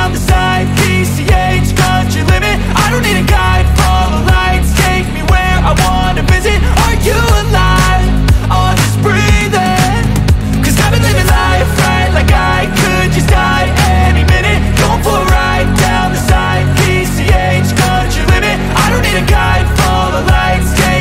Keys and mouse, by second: 0.0-1.4 typing, 2.9 space, 4.4-7.4 typing, 8.8 click, 12.0 click, 12.4 click, 16.2 click, 20.6 click.